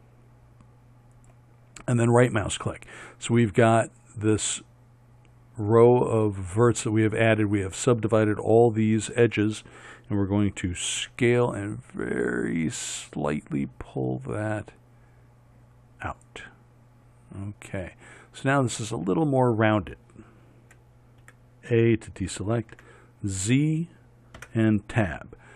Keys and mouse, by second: 11.0 s, 21.3 a, 22.8 z, 24.4 Tab.